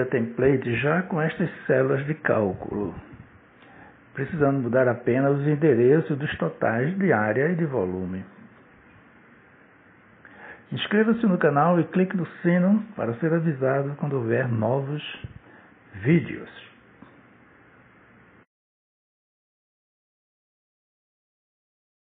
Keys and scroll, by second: 7.2 0, 7.9 ., 8.3 4, 8.6 Return.